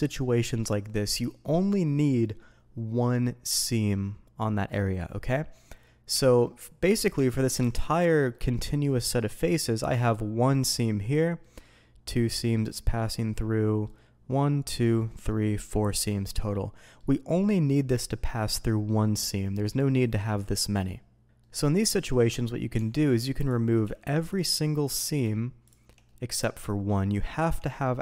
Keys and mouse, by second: 6.1 Tab, 6.4-6.8 middle drag, 7.1 Tab, 8.3 middle click, 9.5 middle click, 9.9 middle click, 11.4 middle drag, 12.4 middle drag, 12.7-13.8 middle drag, 14.4 middle drag, 14.9-15.3 middle drag, 16.0-17.0 middle drag, 19.7-20.1 middle drag, 21.4-22.1 middle drag, 22.7 Tab, 24.6-25.0 middle drag, 25.6 shift+click, 26.0-26.4 middle drag, 27.3 ctrl+e.